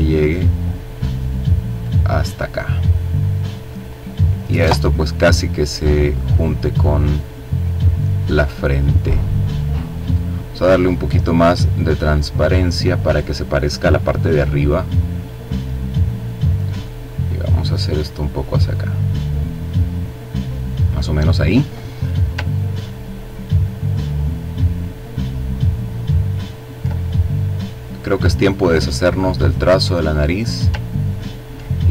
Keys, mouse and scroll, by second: 1.6-3.5 drag, 3.7-4.8 drag, 7.5 click, 9.1 click, 10.7-12.1 drag, 15.9-17.5 drag, 17.8-19.7 drag, 22.0-22.6 ctrl+scroll down 2, 22.8 ctrl+click, 23.6-24.3 ctrl+scroll up 3, 27.0 click, 28.8 click, 29.8-30.3 ctrl+scroll down 2, 31.5-31.9 drag.